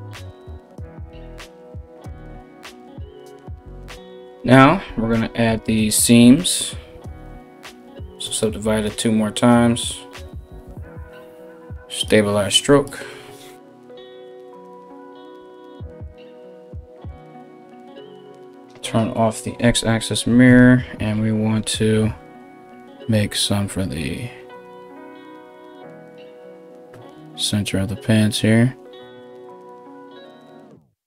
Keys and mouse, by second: 20.2-22.7 typing.